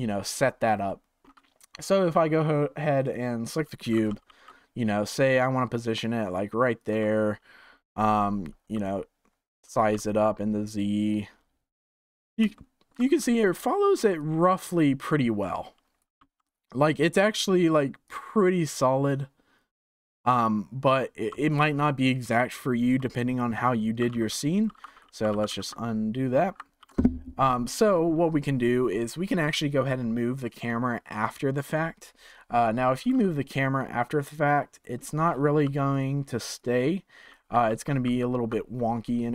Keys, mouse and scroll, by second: 0.3-0.8 scroll up 1, 0.8-3.0 shift+middle drag, 3.0 click, 3.9 g, 9.6 s, 12.5-14.1 shift+middle drag, 14.1-16.1 drag, 16.1 z, 18.0-21.0 drag, 23.9 s, 25.0 ctrl+z, 25.3 ctrl+z, 25.4 ctrl+z, 26.8 ctrl+s, 33.0 click, 33.5 g, 35.0 middle drag, 35.2 scroll down 9, 35.6 g, 36.5-37.6 drag, 37.6 ctrl+z, 38.0 ctrl+z.